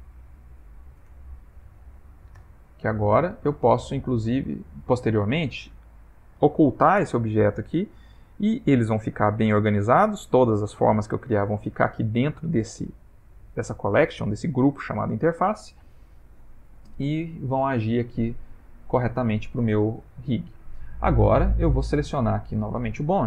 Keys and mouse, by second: 6.1 click, 7.7 click, 16.5 ctrl+middle click, 17.8 middle click, 19.1 Tab, 21.4 click.